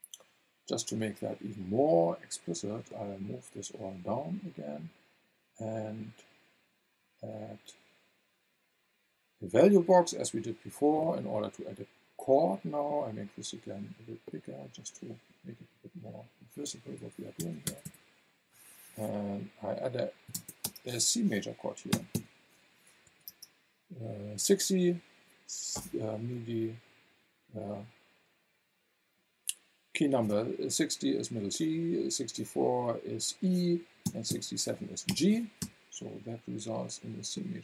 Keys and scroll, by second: 17.0 BackSpace, 20.3 KP_6, 20.4 KP_0, 20.6 space, 21.9 KP_6, 22.1 KP_5, 23.0 BackSpace, 23.3 space, 34.0 KP_6, 34.3 KP_7, 35.1 shift+0, 35.6 Return.